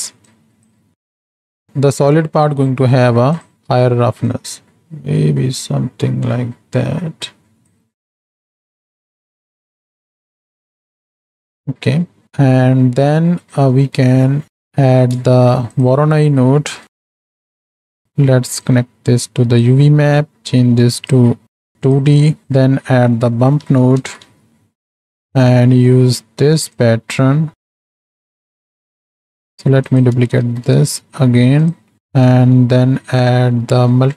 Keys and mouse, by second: 0.4 click, 7.9 space, 8.2 space, 11.1 space, 12.7 click, 15.3 shift+a, 17.2 Down, 18.8-19.7 drag, 20.0 middle click, 21.2-22.0 drag, 22.4-25.3 drag, 24.5 Down, 25.7 middle click, 26.8-28.1 drag, 28.9 click, 29.8 click, 30.5 ctrl+shift+d, 32.1 middle drag, 33.5 middle click.